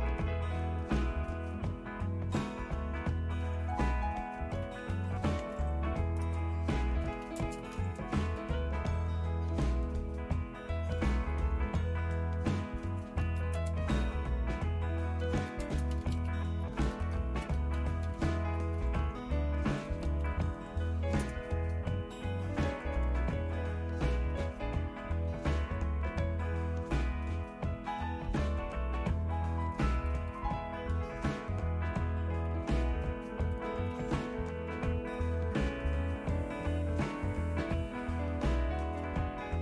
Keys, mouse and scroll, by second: 3.5 super+1, 4.8-9.5 typing, 6.3 Return, 10.8-20.8 typing, 12.0 Tab, 21.2 Return, 22.9 Down, 23.1 Down, 23.3 Down, 24.1 Page_Down, 24.5 Page_Down, 25.0 Page_Down, 25.3 Page_Down, 26.4 Page_Down, 27.3 Page_Down, 28.5 Page_Up, 29.7 Down, 29.9 Down, 30.1 Down, 30.3 Down, 32.2 Down, 32.6 Down, 32.8 Down, 33.6 Up, 33.8-34.6 typing, 34.7 Down, 34.9 Down, 35.1 Down.